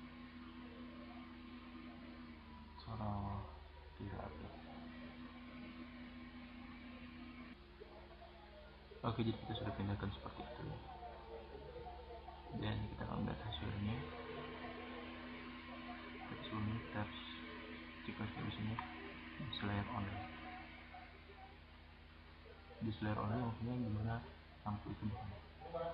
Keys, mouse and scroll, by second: 6.3 drag, 6.4 click, 6.5 middle click, 17.0-17.5 middle drag, 18.8 click.